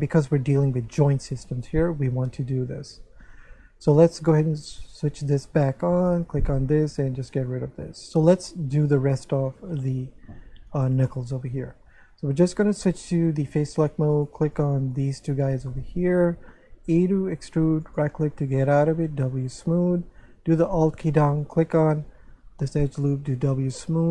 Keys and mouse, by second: 4.8 click, 6.0 click, 7.2 click, 8.7 Tab, 10.2 7, 11.1 shift+middle click, 13.0 click, 14.1 right click, 14.5 shift+right click, 15.7 shift+middle click, 16.9 e, 17.8 right click, 19.0 w, 19.4 click, 21.4 alt+right click, 23.4 w.